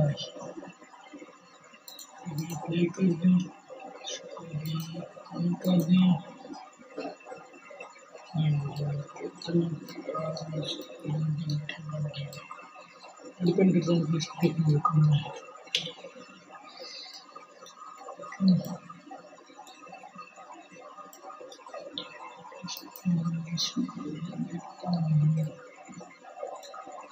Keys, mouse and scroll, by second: 9.4-14.2 middle drag, 14.2 KP_1, 17.5-21.9 middle drag, 21.9-23.9 drag.